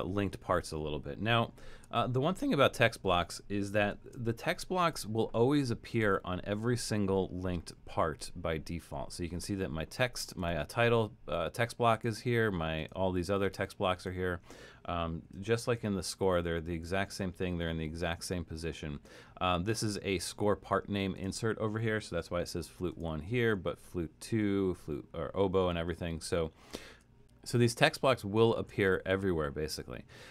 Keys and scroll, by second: 1.6 super+=, 3.9 alt+super+., 15.5 alt+super+,, 17.0 alt+super+., 23.4 alt+super+., 24.4 alt+super+., 25.5 alt+super+,, 25.9 alt+super+,, 28.5 alt+super+,.